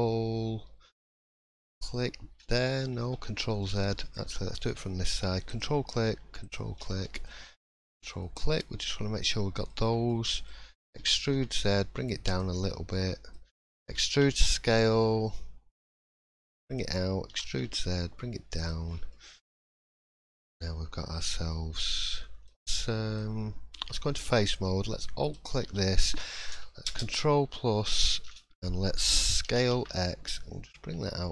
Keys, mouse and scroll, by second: 1.7 ctrl+click, 3.0 ctrl+z, 3.6 middle click, 5.5 ctrl+click, 6.8 middle click, 7.7 ctrl+click, 8.2 middle click, 9.7-10.8 scroll down 5, 10.1 middle click, 10.9 e, 12.6 middle click, 13.8 e, 18.8-19.4 scroll down 5, 19.1 middle click, 19.7 scroll up 1, 20.0 shift+middle click, 20.3 scroll up 2, 20.6 middle click, 21.5 middle click, 22.1 shift+middle click, 22.4 shift+scroll up 2, 22.7 middle click, 23.8 3, 25.3 alt+click, 26.8 ctrl+KP_Add, 29.4 s.